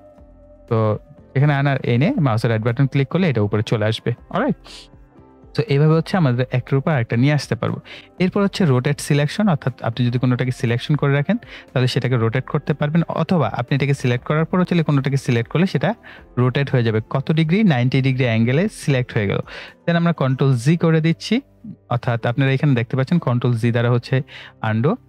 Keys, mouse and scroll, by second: 2.2 right click, 4.5-7.9 drag, 14.6 click, 16.0 scroll up 1, 17.5-19.8 drag, 19.8 ctrl+z, 21.1 click.